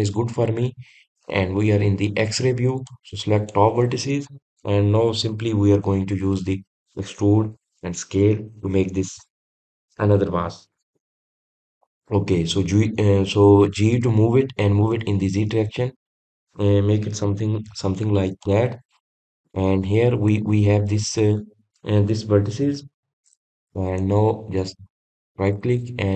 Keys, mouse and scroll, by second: 4.1 click, 20.3 scroll down 1, 20.6-21.1 scroll up 2, 21.1-24.1 scroll down 1, 25.1 click, 25.7-26.1 middle drag.